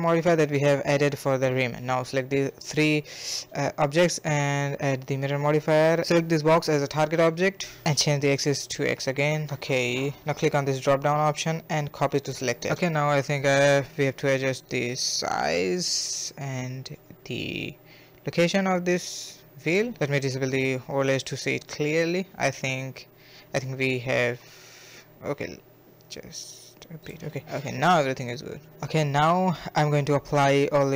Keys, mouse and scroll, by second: 0.0 shift+click, 0.4 shift+click, 0.8-1.3 scroll down 7, 1.3-1.9 drag, 3.6-4.6 scroll down 12, 4.6 click, 5.3 click, 7.6 click, 8.6-9.5 middle drag, 9.5 scroll down 1, 9.7-11.4 middle drag, 11.4-13.3 drag, 13.3 scroll down 1, 13.5-13.9 middle drag, 13.9 KP_1, 14.3 s, 15.1 g, 15.6-16.9 middle drag, 16.9 a, 17.0 a, 17.3-17.7 middle drag, 17.7 s, 18.7 scroll down 1, 18.9 middle click, 19.9 click, 20.3 click, 20.8 middle click, 21.5 scroll up 1, 21.6-23.0 middle drag, 23.0 scroll down 1, 23.1-24.1 middle drag, 24.1-24.9 scroll up 5, 24.9-25.3 middle drag, 25.3 g, 26.1 scroll down 2, 26.3-27.6 shift+middle drag, 27.6 click, 28.1 middle click, 29.1 a, 29.2 a, 29.7-30.3 shift+middle drag, 30.3 scroll down 1, 30.6-30.9 middle drag.